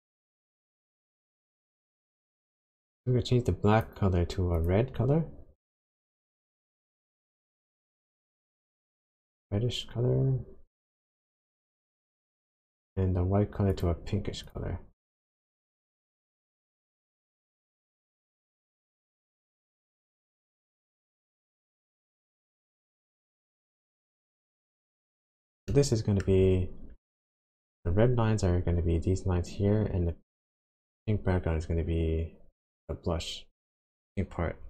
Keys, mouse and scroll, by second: 2.6 click, 4.5 click, 13.7 click, 14.5 click, 15.2 click, 25.1-25.6 scroll down 3, 25.7 shift+middle click, 26.3 shift+scroll up 1, 26.8 scroll down 1, 27.0 shift+middle click.